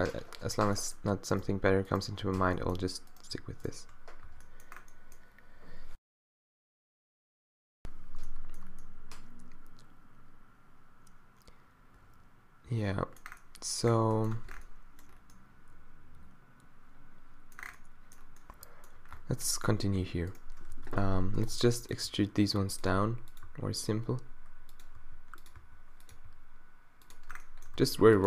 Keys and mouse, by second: 2.4 f, 3.7 shift+click, 4.3 q, 9.0 middle click, 11.9 middle click, 14.4 Tab, 19.2 Tab, 20.7-23.5 typing, 25.0 r, 25.7 s, 26.3 g, 27.8 e.